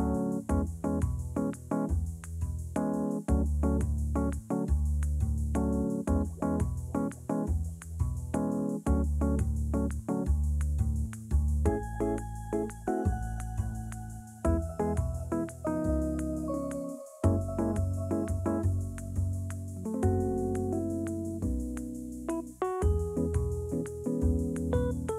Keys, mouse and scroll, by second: 2.2 click, 2.9-3.6 scroll down 2, 3.9-4.4 scroll up 1, 4.4 click, 7.2 click, 9.3 click, 13.4-15.4 scroll down 1, 15.4-18.4 shift+drag, 18.9-21.9 scroll down 1, 22.8 click, 23.5 1.